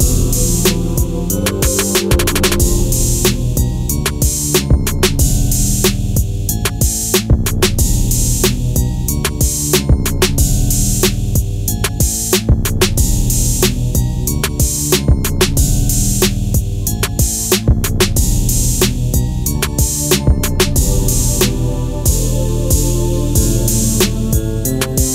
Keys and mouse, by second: 0.9 KP_1, 1.6 KP_3, 2.5 Tab, 4.6 e, 6.4 click, 7.2 Tab, 7.5-8.5 middle drag, 9.0 ctrl+a, 10.5 drag, 12.9 click, 13.7 Tab, 14.9 ctrl+r, 16.6 click, 17.0 ctrl+r, 18.4 click, 18.8 ctrl+r, 19.5 click, 20.0 ctrl+r, 20.6 click, 21.3 ctrl+r, 22.0 right click, 22.7 ctrl+r, 22.9 right click, 23.7 click.